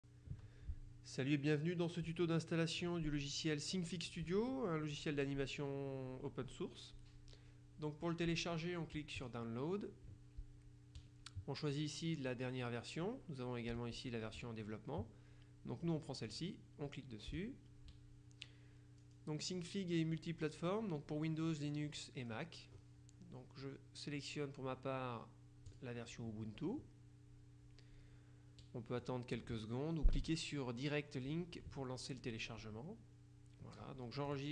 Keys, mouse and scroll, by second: 9.3 click, 16.3 click, 19.1-19.7 scroll down 2, 21.8-22.8 scroll down 2, 22.8-23.4 scroll up 2, 25.8 click, 29.1 click, 34.4 click.